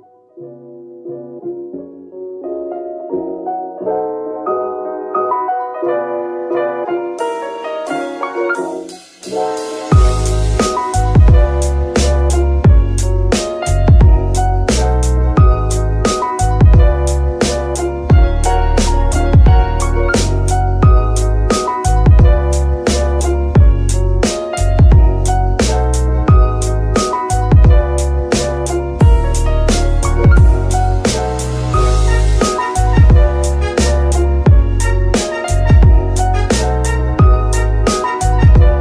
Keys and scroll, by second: 6.7 Escape, 9.0 g, 9.2 Escape, 17.0 g, 17.3 Escape, 20.3 g, 21.4 Escape, 30.4 ctrl+Tab, 38.6 g, 38.6 y.